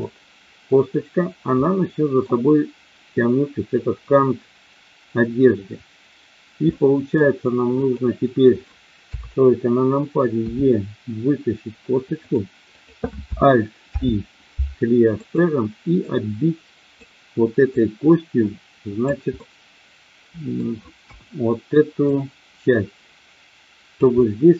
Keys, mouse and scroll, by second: 1.5 middle click, 6.8 middle click, 7.8 click, 8.9 KP_3, 10.4 e, 12.8 click, 13.9 alt+p, 16.0-17.0 drag, 17.7-19.0 drag, 19.4-20.7 middle drag, 21.0 KP_1, 22.0-23.9 drag, 24.2-24.5 middle drag.